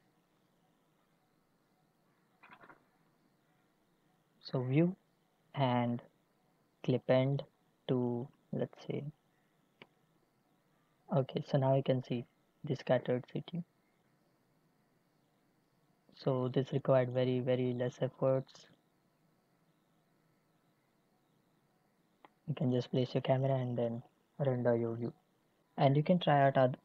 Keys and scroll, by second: 9.8 0, 10.1 Return, 13.0 n.